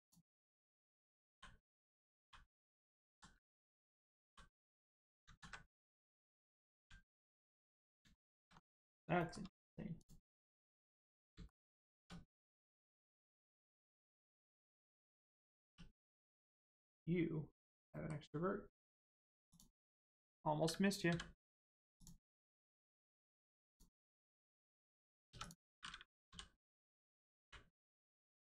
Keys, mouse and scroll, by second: 1.2 l, 2.2 h, 3.0 ctrl+z, 4.2 h, 5.7 ctrl+z, 7.8 click, 8.2 shift+middle click, 8.8 middle click, 9.2 shift+middle click, 9.5 middle click, 9.5-10.0 scroll up 1, 10.0 click, 10.4 middle click, 12.2 middle click, 14.2-15.6 scroll up 1, 15.6 1, 16.6 middle click, 19.4 shift+click, 21.0 m, 22.0 click, 23.0 scroll down 1, 23.6 click, 25.2 3, 25.4 click, 26.2 l, 26.9-27.4 scroll down 1, 27.4 u, 28.3 shift+middle click.